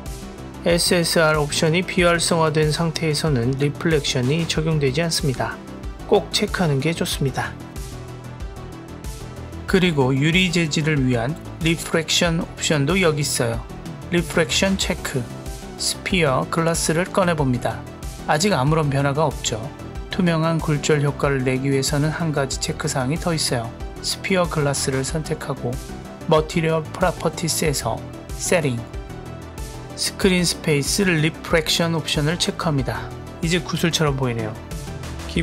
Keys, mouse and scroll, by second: 6.0 click, 6.5 click, 6.9 KP_0, 14.3 drag, 17.3 click, 17.9 click, 22.5 click, 24.2 drag, 25.5 click, 26.8-29.0 scroll down 1, 29.0 click, 29.7-30.9 scroll down 1, 33.2 click, 35.2 click.